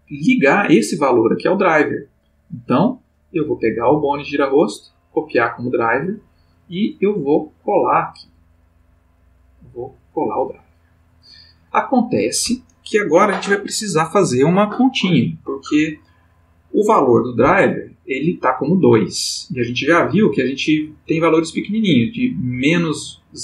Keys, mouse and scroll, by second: 2.3 click, 3.6 right click, 3.9-5.0 middle drag, 5.0 click, 6.7 click, 8.6 right click, 10.0 click.